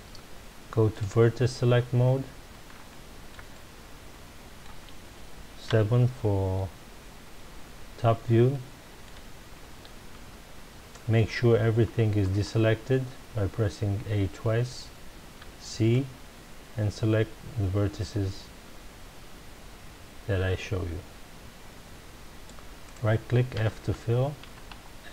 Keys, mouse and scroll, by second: 0.9 click, 2.9-5.6 shift+middle drag, 5.6 KP_7, 8.5-11.3 shift+middle drag, 11.3 a, 16.7 c, 22.9 right click, 23.5 f, 24.4 a.